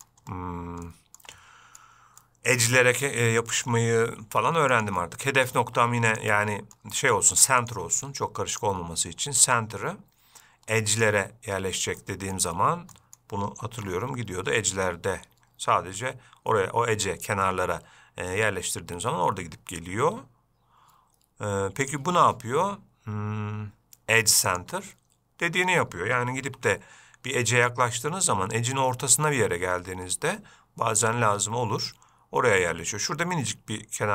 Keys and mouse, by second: 0.1 middle click, 1.1-1.5 shift+middle drag, 1.6-2.1 middle drag, 2.5 middle click, 3.0-3.3 shift+middle drag, 3.5 middle click, 4.5 g, 5.3-5.8 middle drag, 5.9 g, 6.6-7.0 middle drag, 8.8-12.1 drag, 12.3-12.6 middle drag, 13.2 middle click, 14.0 g, 22.2-25.3 drag, 26.7 g.